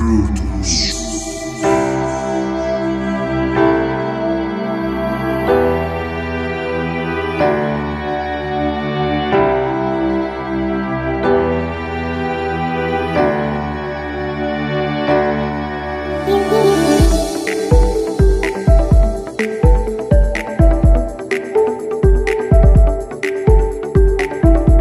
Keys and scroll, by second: 0.0-10.7 typing, 11.5 Return, 12.1-13.2 typing, 18.9 typing, 19.2 Return, 20.2 typing.